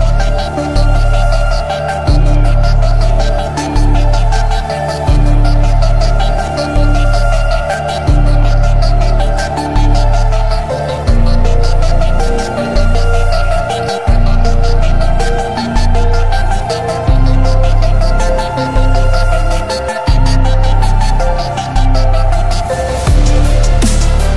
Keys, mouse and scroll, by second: 0.7-1.0 drag, 1.0 middle drag, 1.1-1.5 drag, 1.5 alt+2, 1.5 alt+z, 2.0 ctrl+click, 2.0 ctrl+b, 7.9 g, 7.9 x, 7.9 y, 8.4 shift+middle click, 8.8-9.2 drag, 9.2 middle drag, 9.5 click, 9.5-10.8 middle drag, 10.8 click, 11.0-11.4 middle drag, 11.5-13.5 drag, 13.5 middle click, 14.1 shift+click, 14.1 shift+middle drag, 14.3 shift+click, 14.3 middle click, 14.5-15.0 middle drag, 15.2 drag, 15.2 middle drag, 15.4 click, 18.3 click, 19.6 h, 20.1 click, 20.7 click, 24.2 click.